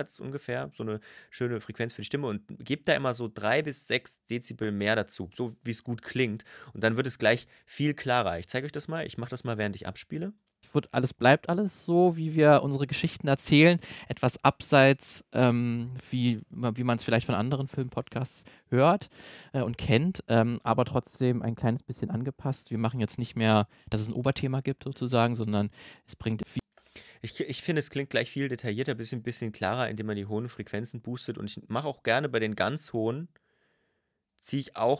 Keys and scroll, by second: 10.4 space, 26.4 space.